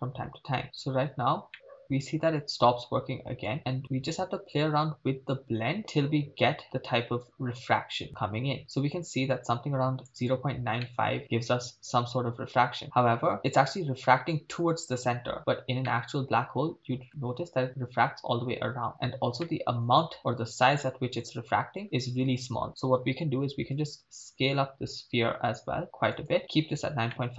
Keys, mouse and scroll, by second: 0.4 ctrl+s, 1.1-1.5 scroll up 2, 1.5-2.7 middle drag, 3.5-10.1 drag, 10.9-13.4 middle drag, 12.1 click, 12.6 click, 15.9-17.1 middle drag, 19.5 middle click, 19.7 click, 20.7-21.8 middle drag, 23.7 s, 26.2 click, 27.1 middle click.